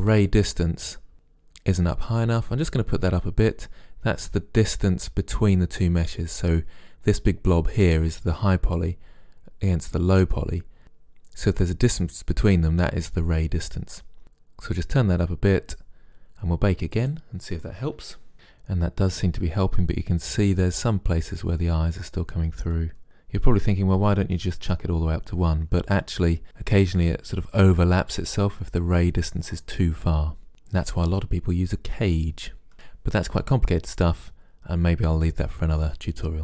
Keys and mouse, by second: 17.0-20.4 drag, 22.1-26.3 drag.